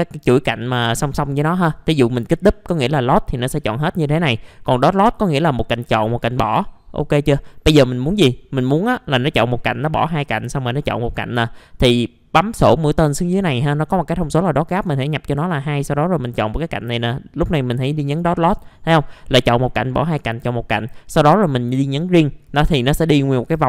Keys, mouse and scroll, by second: 14.7 click, 15.5 click, 19.0 scroll up 1, 21.9 click, 22.4-23.6 scroll down 1.